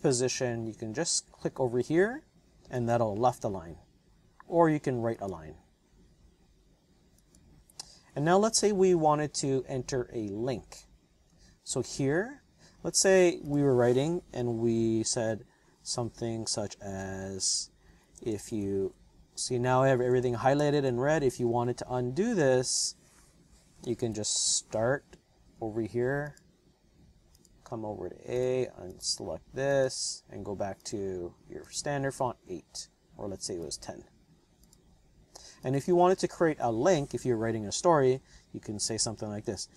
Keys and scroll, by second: 17.6-21.8 typing, 23.9 BackSpace, 24.1 BackSpace, 24.3 BackSpace, 39.6-39.7 typing.